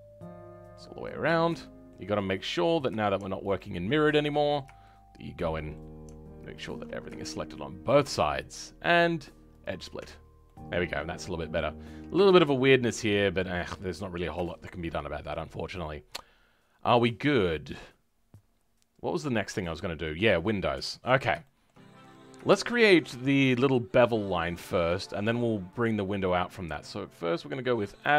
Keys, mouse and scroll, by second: 0.9-1.5 scroll up 5, 1.5 shift+middle click, 2.1-3.5 scroll up 2, 3.5 alt+shift+click, 3.9-4.2 scroll down 2, 4.2-6.5 middle drag, 6.5 alt+shift+click, 6.8 scroll down 2, 7.1-9.5 shift+middle drag, 9.5 right click, 9.9 Tab, 10.1 scroll down 2, 10.4-13.9 middle drag, 13.9-14.4 scroll up 3, 14.4 shift+middle click, 15.0-15.3 scroll down 3, 15.3-18.3 middle drag, 20.9-21.3 scroll up 2, 21.3 shift+middle click, 21.8 scroll up 2, 22.4-28.1 shift+middle drag.